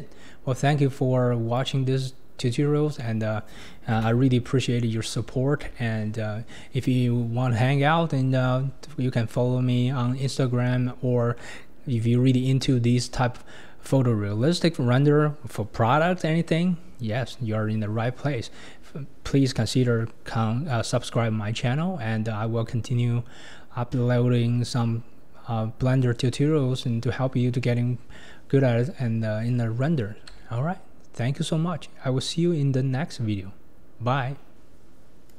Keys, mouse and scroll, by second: 1.7 click, 3.0-4.0 middle drag, 4.0 KP_0, 4.8-5.1 scroll up 4, 5.3-5.9 shift+middle drag, 5.9-6.9 scroll up 2, 10.2-14.4 shift+middle drag, 14.4-18.0 scroll up 1, 18.0-23.1 scroll up 1, 23.1-27.3 scroll up 1, 27.3-28.1 scroll up 1, 28.1 scroll up 1, 28.2-28.9 scroll down 1, 28.9-33.2 scroll down 1.